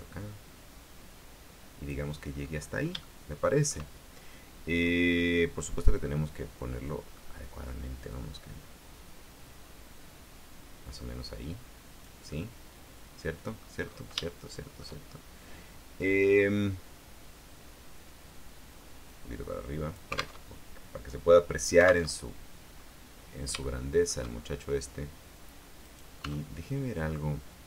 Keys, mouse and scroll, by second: 0.3-2.3 drag, 2.5-3.2 scroll up 3, 3.2 shift+middle click, 4.9-5.3 scroll down 2, 5.3-7.5 middle drag, 8.3-12.4 drag, 12.5-13.9 middle drag, 13.9-14.3 scroll up 2, 14.4 shift+middle click, 15.5-19.3 scroll down 2, 19.3-20.6 drag, 20.5 alt+Tab, 22.3 alt+Tab, 22.9-23.5 scroll up 2, 23.7 shift+middle click, 24.5-24.8 shift+scroll up 2, 26.0 right click, 26.4 Tab.